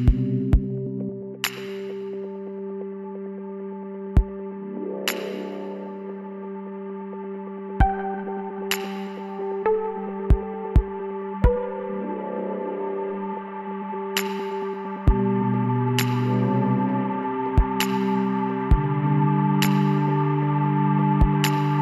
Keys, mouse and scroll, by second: 3.2-4.9 drag, 4.4 ctrl+r, 6.4 middle click, 8.0-11.1 middle drag, 11.1-14.6 drag, 13.9 b, 15.5 s, 18.9-20.7 drag.